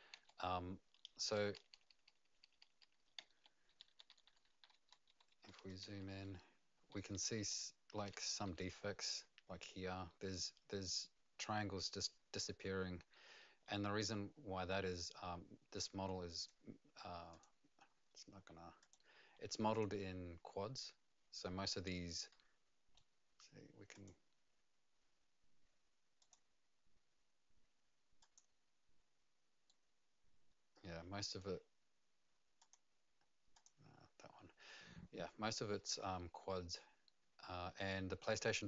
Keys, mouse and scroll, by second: 0.1 d, 1.3-8.5 typing, 16.4 click, 17.3 click, 19.7 click, 22.3 middle click, 23.9 click, 26.3 click, 28.2 click, 29.6 right click, 32.6 click, 33.5 click.